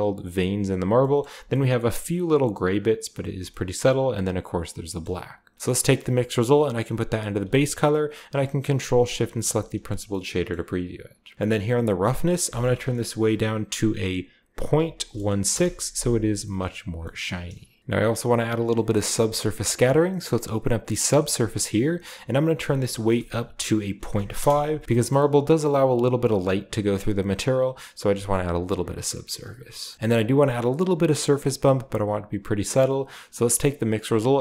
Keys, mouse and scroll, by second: 0.9-3.3 shift+middle drag, 2.5-3.2 scroll down 1, 3.2-4.7 scroll down 1, 3.4-4.7 shift+middle drag, 4.7-5.9 scroll down 1, 4.9 middle drag, 5.2-11.3 drag, 9.2 middle click, 9.2 g, 9.5-11.3 middle drag, 12.1-14.6 drag, 12.3-14.6 middle drag, 14.6-15.4 typing, 15.4 Return, 16.2-16.8 scroll down 1, 16.9-17.8 shift+middle drag, 18.6 middle click, 19.0-21.0 scroll up 1, 21.0 click, 21.4 scroll up 1, 22.8 click, 23.9 click, 23.9-24.2 typing, 24.3 Return, 24.8-27.6 shift+middle drag, 25.1-27.6 shift+scroll up 1, 29.2-29.7 scroll down 3, 29.7 middle click, 29.9-31.3 shift+scroll up 1, 31.3 click, 33.8-34.4 drag.